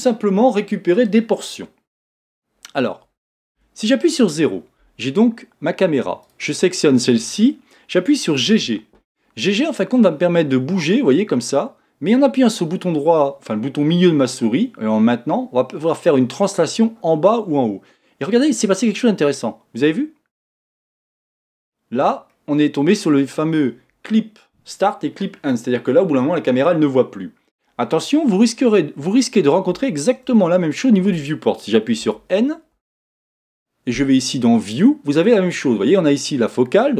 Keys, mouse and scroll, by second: 3.5 KP_0, 6.2 click, 8.6 g, 22.3-25.3 middle drag, 28.4-30.5 scroll up 4, 30.5-32.0 shift+middle drag, 32.0 n, 32.7 n, 34.6 click.